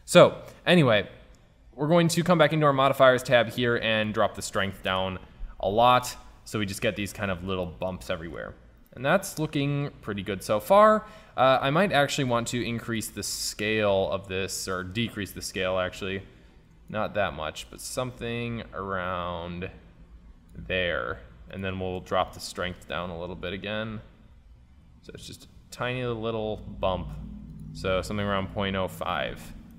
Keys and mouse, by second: 6.2-7.9 middle drag, 8.2 middle click, 8.6-9.1 middle drag, 12.9-14.7 drag, 22.6-23.8 drag, 27.6-29.3 drag.